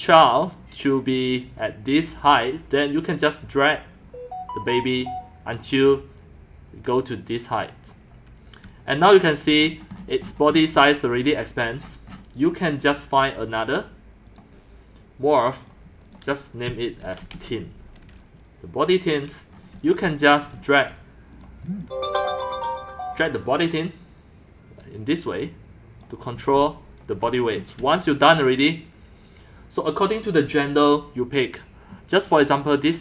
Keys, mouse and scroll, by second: 3.6 click, 7.9 click, 8.7-9.4 c, 9.7-10.5 scroll, 10.5 scroll down 14, 10.8 c, 11.1 drag, 11.5 click, 11.8-14.4 scroll down 17, 14.4-14.8 drag, 16.1 click, 16.4-17.8 typing, 19.5-20.6 typing, 19.5 middle drag, 20.4 drag, 20.9 click, 21.8 click, 22.1 BackSpace, 23.8-25.4 drag, 26.0 click, 26.3-30.3 typing, 27.0 click, 27.3 scroll down 3, 27.4 middle click, 27.4-27.8 scroll, 30.5-31.5 drag.